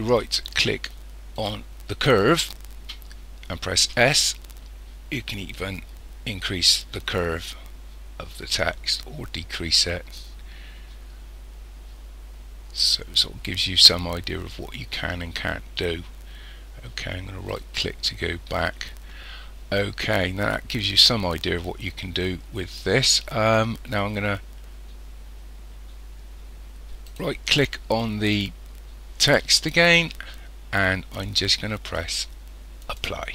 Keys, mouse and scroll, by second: 1.4 right click, 3.8 s, 27.1 right click, 32.8 click.